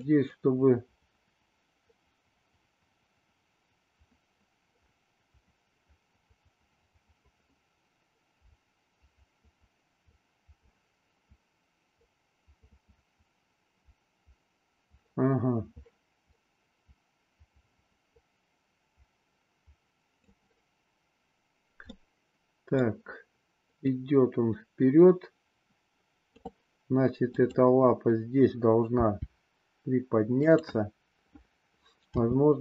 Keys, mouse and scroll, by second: 0.4-20.3 drag, 21.8-22.9 middle drag, 23.9-26.4 drag, 27.3 click, 28.9 g, 32.1 r.